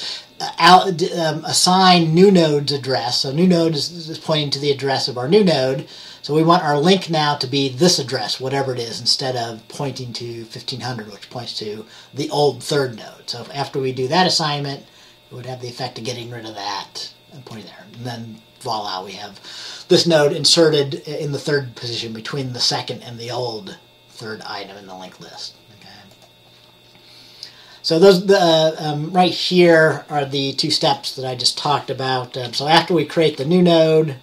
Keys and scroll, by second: 32.5 Delete, 33.4 Delete.